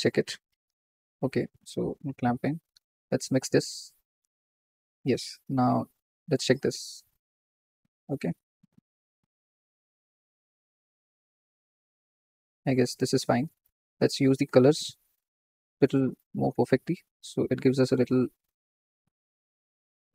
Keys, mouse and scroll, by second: 1.6 click, 2.1-6.4 drag, 8.3-16.3 drag, 16.7 click.